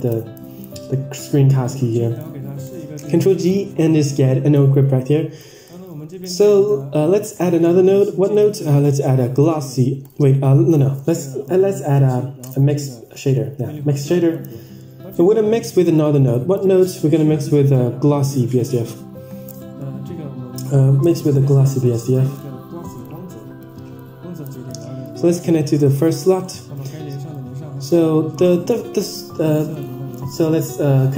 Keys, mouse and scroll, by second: 0.0 click, 0.0 n, 1.1 n, 2.0 middle click, 2.5 click, 3.0 click, 4.0-4.5 drag, 5.0 click, 5.5 drag, 5.8-6.1 middle drag, 7.2 shift+a, 10.5-11.2 drag, 13.0-14.5 drag, 14.9-15.5 middle drag, 15.9 click, 19.5 middle drag, 19.9 shift+a, 23.5 click, 24.9-26.4 drag, 26.5-27.0 middle drag, 27.5 click, 28.2-28.6 drag, 29.5-30.5 drag.